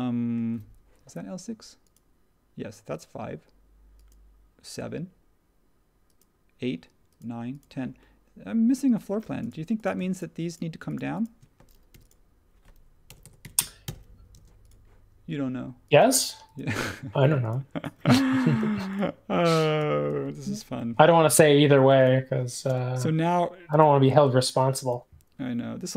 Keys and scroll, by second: 9.2 space, 11.9-14.0 typing, 18.6 space, 20.9 m, 22.6 space, 23.7 m.